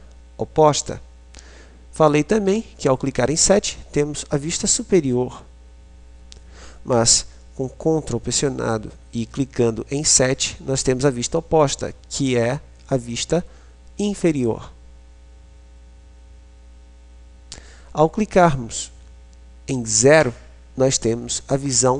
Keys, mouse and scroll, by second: 1.0 KP_7, 10.2 ctrl+KP_7, 20.2 KP_0.